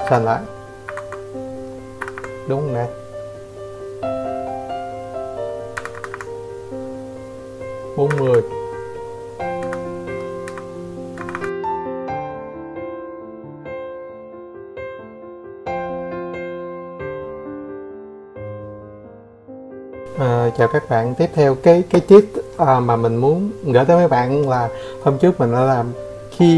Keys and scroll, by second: 0.1 Escape, 0.3 Escape, 1.7 Escape, 2.5 Escape, 3.3 Escape, 3.4 Escape, 14.1 6.